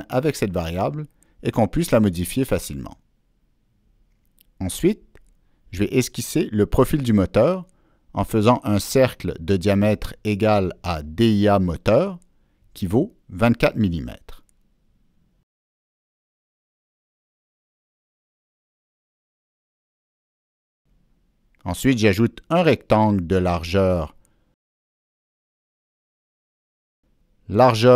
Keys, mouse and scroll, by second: 0.4 click, 4.1 right click, 5.7 click, 6.7 click, 7.2 right click, 8.7 click, 9.3 click, 13.1 click, 14.4 click, 15.4 click, 16.2 click, 17.6 Escape, 17.6 click, 18.7 click, 19.7-20.1 scroll down 1, 20.1-20.5 ctrl+scroll up 1, 22.0 click, 23.4 right drag, 24.7 right click, 25.1 click, 25.2 right click, 26.7 click.